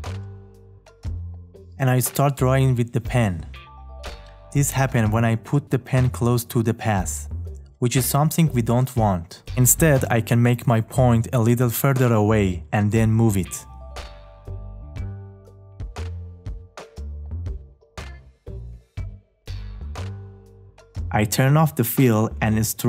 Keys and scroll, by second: 0.9 `.